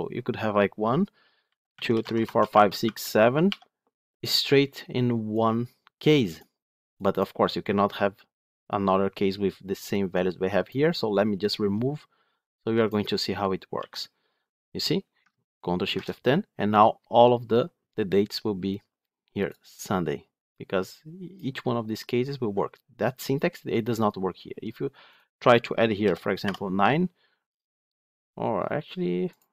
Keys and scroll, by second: 13.6 ctrl+x, 15.7 ctrl+shift+F10.